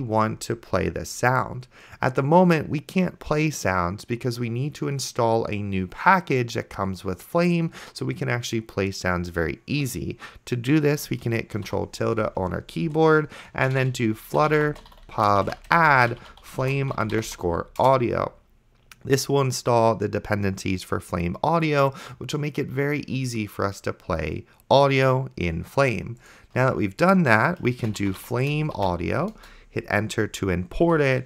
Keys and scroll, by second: 12.0 ctrl+`, 13.3-17.8 typing, 17.8 Return, 27.7-29.2 typing, 29.4 Return, 30.6-31.2 typing.